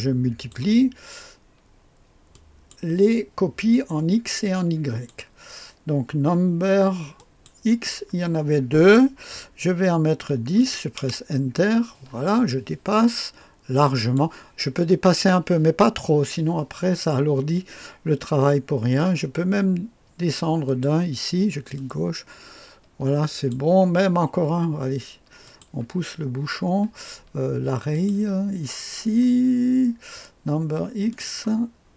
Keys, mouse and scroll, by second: 2.3-3.3 drag, 4.4-5.7 drag, 7.1-8.3 drag, 10.1 KP_1, 10.5 KP_0, 10.9 Return, 12.9-14.3 drag, 18.9 click, 19.8-20.6 scroll down 2, 20.6 click, 21.7 click, 22.8-24.2 drag, 25.4 click, 27.9-31.8 drag, 31.8-31.9 scroll down 2.